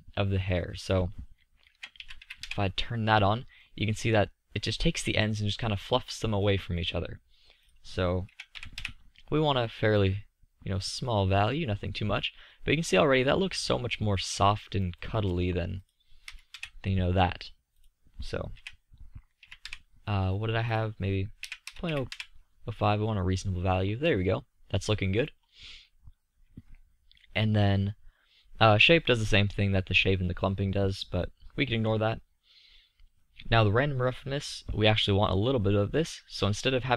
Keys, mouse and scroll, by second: 3.1 middle click, 9.9-10.3 middle drag, 12.9-13.5 middle drag, 14.1-16.1 middle drag, 16.1-17.9 drag, 18.0-21.3 middle drag, 23.4-25.2 middle drag, 34.5-36.9 middle drag.